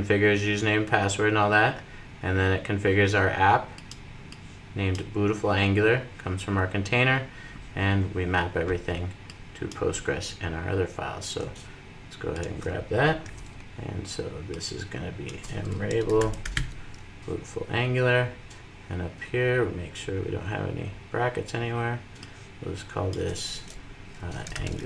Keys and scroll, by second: 13.6 super+v.